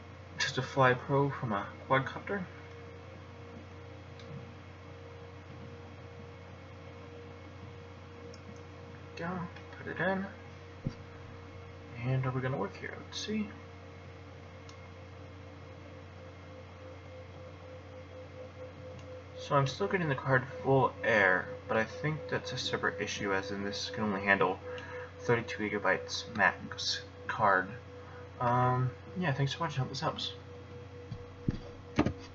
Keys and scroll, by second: 31.9 F12.